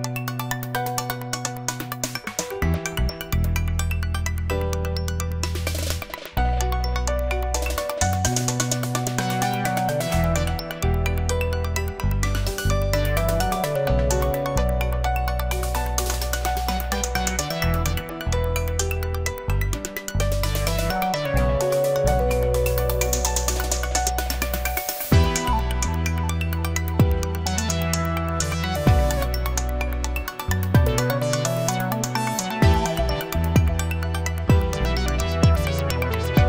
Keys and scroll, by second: 14.1 ctrl+g.